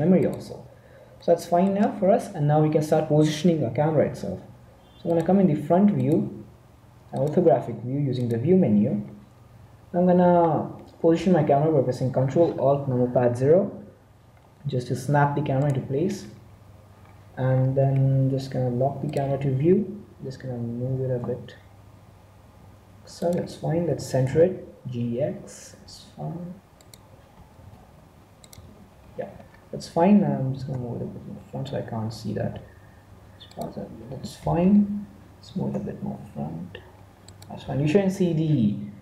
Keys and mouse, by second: 1.2-4.0 middle drag, 6.5 click, 8.2 click, 10.3-13.3 middle drag, 13.3 ctrl+alt+z, 17.5-19.0 middle drag, 17.9 n, 19.0 click, 19.2 n, 20.7 g, 23.8 g, 27.5 n, 28.5 n, 30.7 g, 35.4 g.